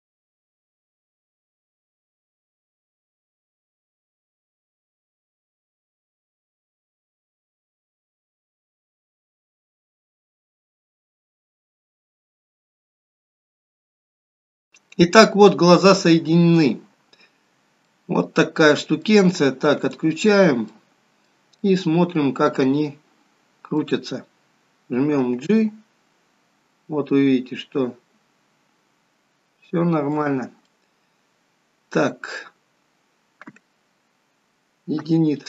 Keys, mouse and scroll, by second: 1.0 click, 1.5 click, 2.2 click, 3.8 click, 4.4 click, 5.1 middle click, 5.5 middle click, 5.8 shift+click, 6.4 ctrl+p, 6.8-7.3 scroll down 3, 6.9 middle click, 7.3 click, 8.3 click, 8.6 click, 10.2 click, 10.6 middle click, 11.0 click, 11.1 middle click, 11.4 r, 12.4 middle click, 12.6-13.0 scroll up 5, 13.1 click, 13.2 middle click, 13.4 g, 14.0 click, 14.1 middle click, 14.4 scroll down 2, 14.7 middle click, 17.5 scroll down 2, 17.6-18.0 scroll up 2, 18.0 middle click, 20.0 click, 20.5 scroll down 1, 20.8 middle click, 21.8 middle click, 30.8 middle click, 35.2 KP_1.